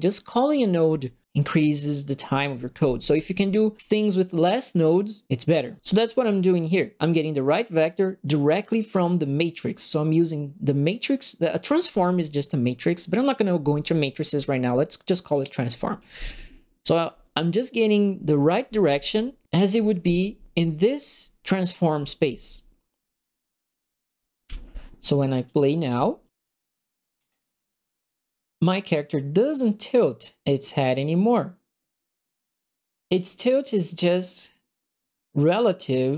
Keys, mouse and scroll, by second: 23.2 click, 23.8 click, 24.4 Delete, 25.4 click, 26.3 click, 28.7 right click, 34.2 right click.